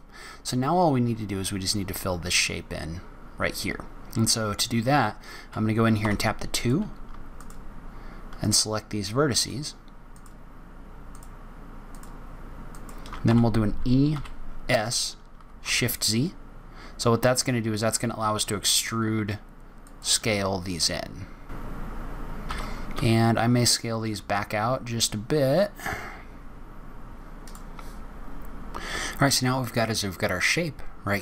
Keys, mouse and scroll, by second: 5.9 2, 6.4 click, 7.2 shift+click, 13.2 shift+e, 20.1 g, 27.4 middle click, 27.4-27.9 scroll down 3, 29.3-31.2 scroll up 1.